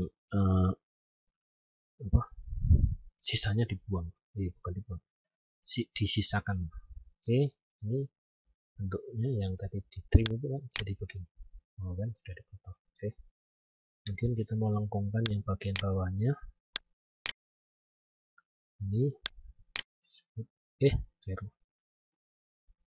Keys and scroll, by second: 11.9 ctrl+z, 20.9 ctrl+z.